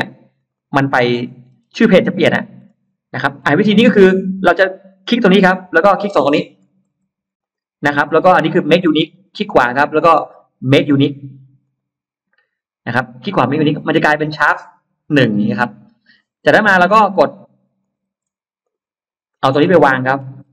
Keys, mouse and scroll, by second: 0.2 click, 0.4 click, 0.8 scroll, 1.4 scroll, 1.9 scroll, 2.5 scroll, 3.0-3.3 scroll up 2, 3.5-3.9 scroll up 2, 4.7 click, 5.5-5.8 scroll down 2, 6.1-6.5 scroll down 2, 6.5 scroll up 2, 7.3 shift+click, 9.1 right click, 11.5 click, 16.8 scroll up 2, 17.7 click, 18.5 shift+click, 19.1 shift+click, 19.5 middle click, 20.1-20.5 scroll down 4.